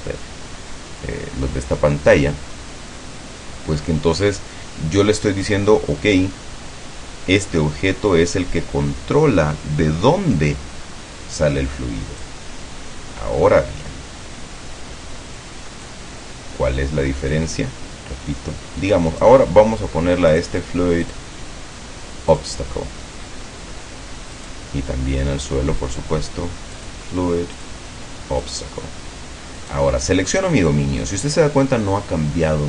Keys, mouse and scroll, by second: 12.3-16.2 drag, 19.2 right click, 20.4 click, 21.1 click, 22.4 click, 24.4 right click, 26.8 click, 27.6 click, 28.5 click, 29.6 right click.